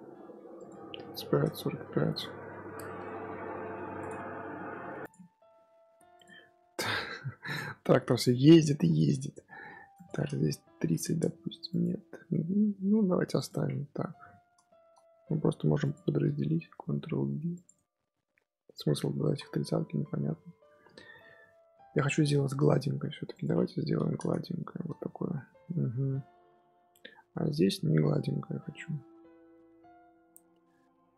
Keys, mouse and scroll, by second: 2.1-4.8 scroll down 3, 6.9-7.6 middle drag, 7.6-8.0 scroll up 1, 8.0 click, 8.2-8.6 scroll up 2, 8.6 Tab, 9.0 Tab, 9.8-13.4 drag, 14.1 scroll up 1, 14.1-14.6 scroll down 1, 14.6 shift+middle click, 15.1 Tab, 15.4 2, 15.7 alt+click, 16.5 ctrl+b, 17.7 Tab, 18.5-19.0 middle drag, 19.0 ctrl+z, 19.2 ctrl+z, 19.8 Tab, 19.9-20.3 middle drag, 20.3-20.9 scroll up 1, 20.9-23.2 shift+middle drag, 23.2-25.1 drag, 25.1-25.4 shift+middle drag, 25.4 scroll up 1, 25.7-26.7 middle drag, 26.7 Tab, 27.1 2, 28.6-30.7 middle drag, 30.7 3.